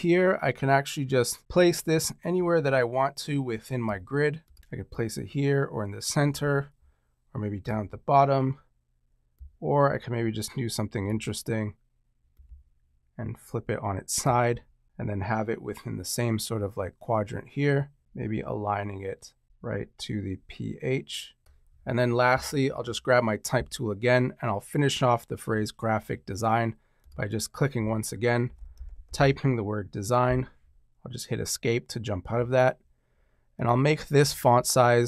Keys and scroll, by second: 28.1-30.1 typing, 30.2 Escape.